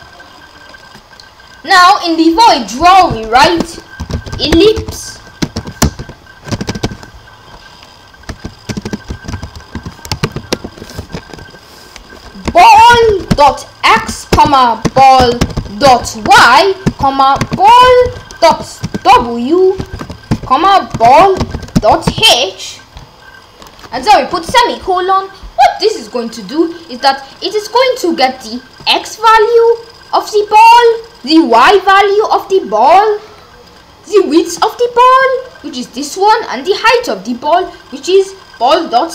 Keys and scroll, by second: 3.4 Return, 3.8-6.6 typing, 8.3-10.6 typing, 11.2 Left, 12.5-22.6 typing, 24.3 ;.